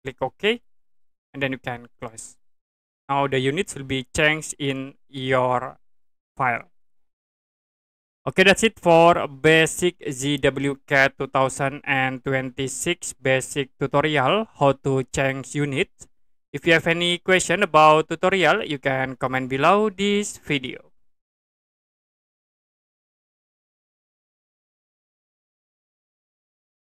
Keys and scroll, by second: 22.2 Print.